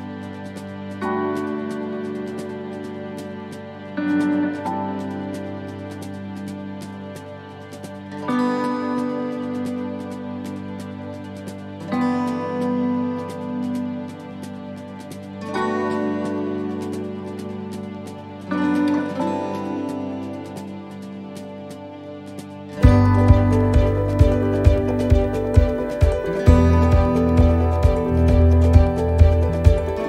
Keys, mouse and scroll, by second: 0.9 click, 17.4 right click, 18.5 shift+d, 22.2 shift+middle click, 22.6-23.1 scroll down 4, 25.0 click, 29.2 right click, 29.7 shift+right click.